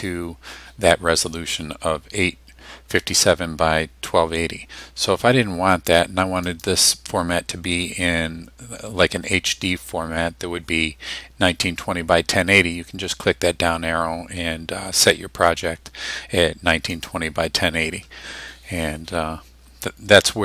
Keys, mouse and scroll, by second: 6.5 click, 16.9 click.